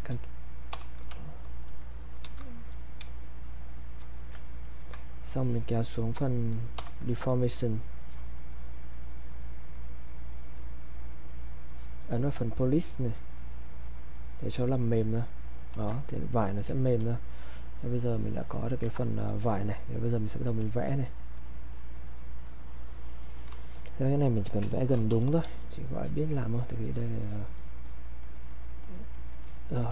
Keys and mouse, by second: 2.2 ctrl+d, 2.7 click, 3.0 space, 3.5 click, 3.8 space, 4.6 ctrl+right click, 5.4-16.1 drag, 16.1 ctrl+right click, 16.8-18.5 drag, 18.5 alt+click, 19.0 ctrl+right click, 20.6 alt+click, 24.6-25.6 typing, 26.0 click, 29.4 alt+click.